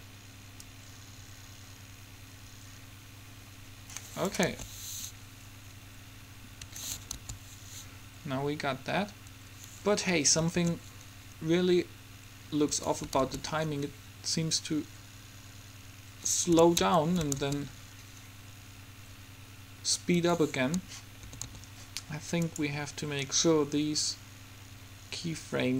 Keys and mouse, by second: 1.1-2.6 drag, 4.6 alt+a, 6.9 Escape, 7.3 alt+a, 9.4 Escape, 10.7 alt+a, 13.0 Escape, 13.3 alt+a, 17.0 Escape, 17.7 alt+a, 20.2 Escape, 21.4 a, 21.6 a, 22.6-24.4 drag.